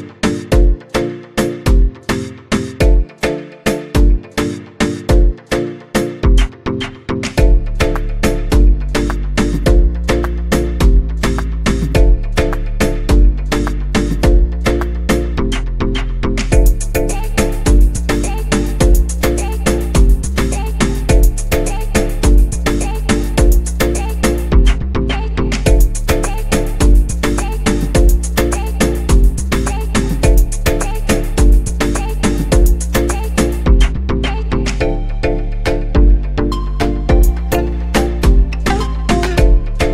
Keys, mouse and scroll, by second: 2.4 click, 4.1-9.5 drag, 10.6 click, 17.4-18.9 scroll down 4, 18.9-20.1 scroll down 2, 20.8-21.1 drag, 22.1-26.3 drag, 36.3 click, 37.0-37.8 scroll down 5, 38.1-39.8 drag, 39.8-39.9 scroll down 4.